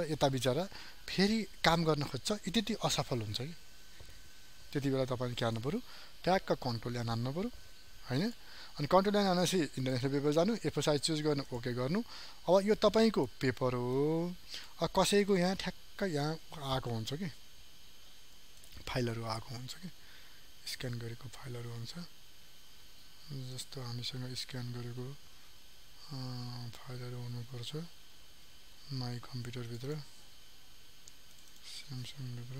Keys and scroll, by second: 5.4 ctrl+n.